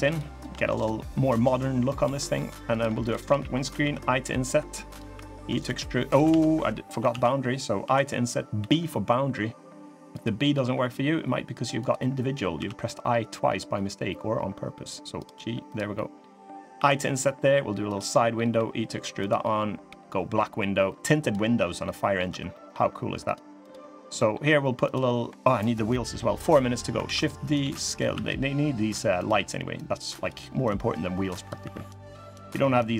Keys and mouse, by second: 0.1 shift+click, 0.6-1.8 drag, 2.0 middle click, 2.5 click, 2.8 shift+click, 3.5 i, 4.9 e, 6.0 ctrl+z, 6.8 ctrl+z, 7.6 i, 10.3 e, 12.3 g, 15.7 middle click, 16.5 i, 17.8 middle click, 18.3 e, 19.6 g, 21.6 middle click, 22.0 3, 22.2 middle click, 23.4 click, 23.9 middle click, 24.6 click, 26.8 shift+d, 27.3 s, 29.5 click, 30.4 click, 31.3 e.